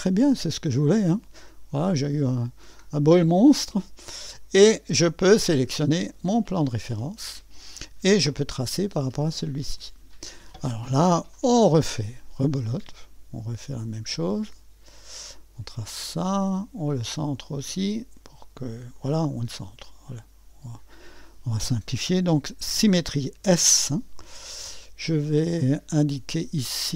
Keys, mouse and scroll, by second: 0.6-2.1 drag, 3.1-4.3 drag, 6.4 click, 8.3 click, 9.3-10.0 scroll up 1, 12.6 click, 13.8 click, 15.3 click, 17.3 click, 18.9 click, 20.7 click, 23.4 s, 26.1-26.9 drag.